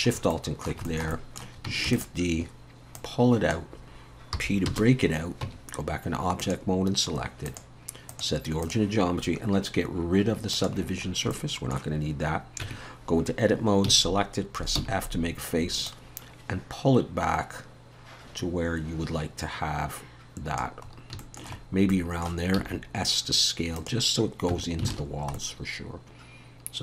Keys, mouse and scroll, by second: 0.3 middle click, 0.9 shift+middle click, 1.9 shift+d, 3.0 click, 4.3 p, 5.4 Tab, 6.4 click, 7.5 click, 10.5 click, 11.1 scroll up 2, 11.3 shift+middle click, 12.6 Tab, 13.9 a, 14.8 f, 15.9 click, 20.9 scroll up 2, 21.2 shift+middle click, 21.6 scroll down 2, 21.9 middle click, 22.6 s, 24.5 Tab, 24.9 alt+a, 25.1-25.4 scroll down 2, 25.4 middle click.